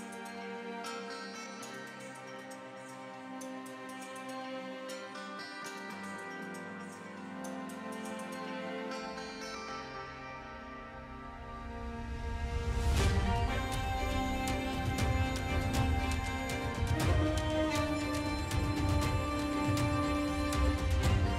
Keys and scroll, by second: 3.2 e, 3.7 [, 11.4 v, 11.8 e, 14.1 v, 14.7 space, 15.4 ctrl+space, 16.4 ctrl+e, 16.7 ctrl+space, 16.8 ctrl+space, 17.1-18.1 typing.